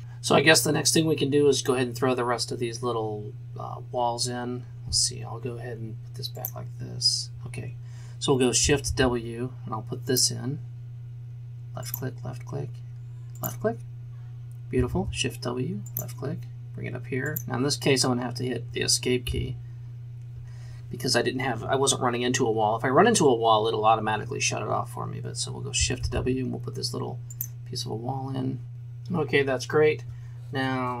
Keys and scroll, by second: 8.9 shift+w, 14.9 shift+w, 19.4 Escape, 26.0 shift+s.